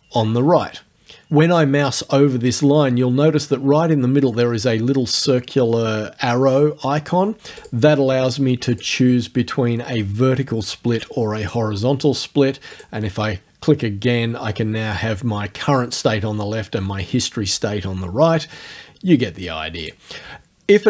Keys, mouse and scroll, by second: 7.6 click, 8.7 click, 12.8 click, 19.8 click.